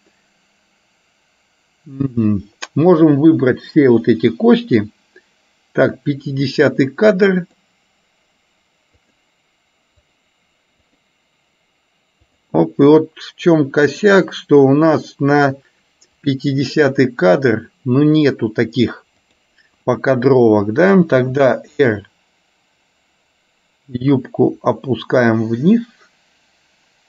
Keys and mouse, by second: 2.2-3.2 drag, 7.7 click, 9.2 click, 10.3 click, 10.9 click, 12.4 click, 14.1 click, 16.4 click, 19.3 click, 21.3 r.